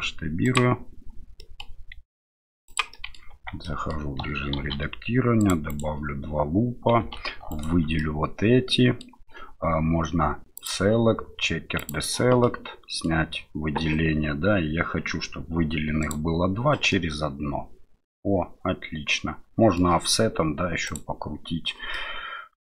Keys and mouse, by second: 1.5 middle click, 1.9 s, 2.9 middle click, 3.3 Tab, 3.6 middle click, 4.6 ctrl+r, 7.0 3, 7.5 alt+right click, 8.0-9.0 middle drag, 10.7-11.9 drag, 12.4 middle click, 16.0 click, 16.9-19.8 middle drag, 20.8 click, 21.9-22.6 middle drag.